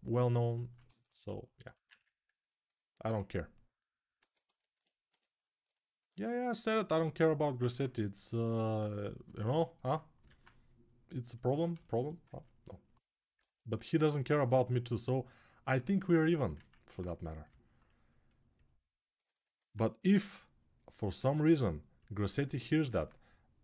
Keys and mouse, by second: 0.1-4.9 alt+shift+right drag, 4.0 alt+q, 4.9 g, 10.0 alt+q.